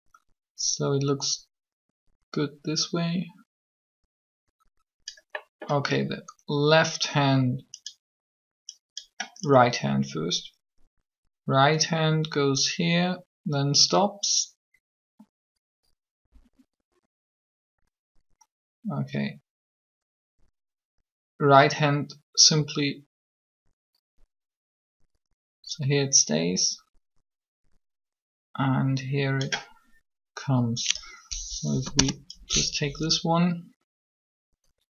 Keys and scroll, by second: 31.6 Delete, 31.7 Return.